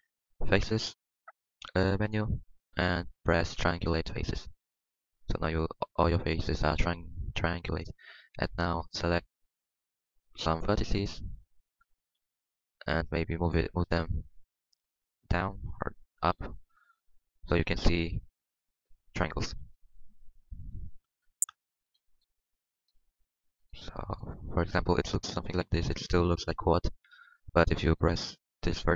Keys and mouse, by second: 11.7 z, 12.0 z, 12.2 Tab, 13.1 Tab, 16.2 g, 17.0 Tab, 19.5 KP_3, 19.9 KP_2, 20.8 KP_3, 20.9 KP_1, 22.9 Tab, 24.6 Tab, 27.4 Tab.